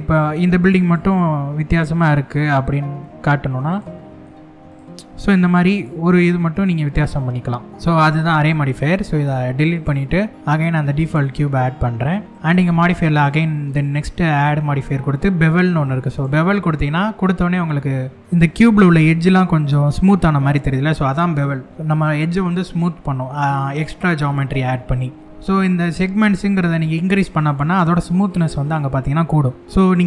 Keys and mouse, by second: 0.5 click, 3.3 click, 5.4 click, 5.9 middle click, 7.3 middle click, 8.1 Tab, 8.8 x, 10.3 shift+a, 12.8-15.9 drag, 17.2-17.8 shift+middle drag, 18.2 middle drag, 19.8-20.4 shift+middle drag, 26.9 click, 27.0 click, 27.3 click, 27.5 click, 27.9 click, 28.1 click, 28.2 drag, 29.1-29.6 middle drag, 29.7-30.0 shift+middle drag.